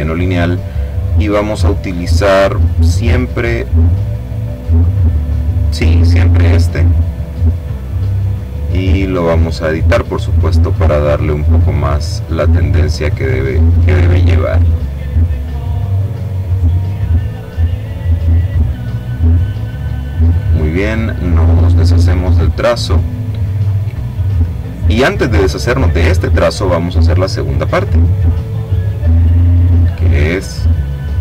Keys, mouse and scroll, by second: 1.3-6.7 drag, 9.2 click, 12.0-15.8 drag, 16.2-18.6 drag, 19.8 click, 21.2 click, 22.0 click, 28.8 click, 31.1 click.